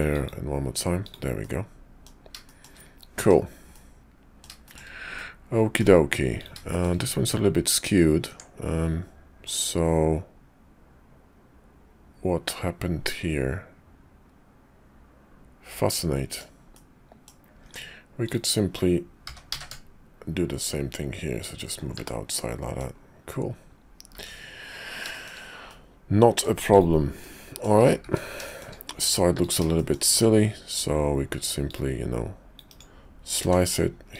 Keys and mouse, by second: 0.1 click, 1.0 click, 1.4 middle click, 2.4 shift+click, 3.7 middle click, 4.6 shift+click, 5.2 middle click, 6.4 click, 6.7 shift+click, 8.3 Tab, 9.4 middle click, 10.1 click, 10.5-16.4 middle drag, 16.7 middle click, 17.6 Tab, 18.2 click, 19.2 g, 22.0 Tab, 22.3 middle click, 24.1 `, 25.1 shift+click, 25.7 middle click, 26.7 click, 27.2 middle click, 27.6 click, 28.4 shift+middle click, 29.4 click, 29.7 shift+middle click, 31.7 click, 33.4 d.